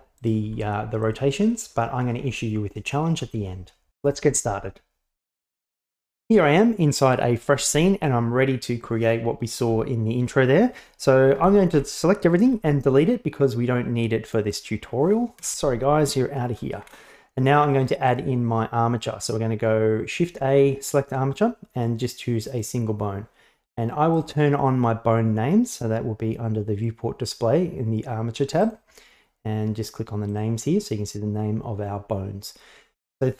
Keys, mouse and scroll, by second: 0.2 right click, 0.5 s, 11.4 a, 11.7 a, 12.5 x, 15.4 KP_1, 16.9 shift+a, 24.2 right click, 28.6 right click, 30.3 click.